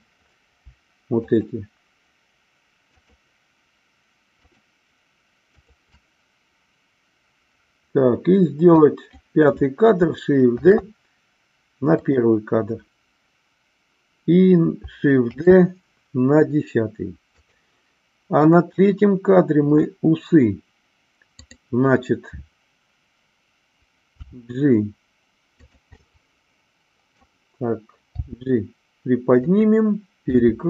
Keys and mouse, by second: 1.3 shift+click, 2.9-4.0 shift+drag, 5.5-6.6 shift+drag, 8.7 click, 10.6 shift+d, 15.2 shift+d, 18.3 click, 21.3 click, 24.1 g, 25.9-27.3 middle drag, 28.3 g, 29.5 click, 30.4 r.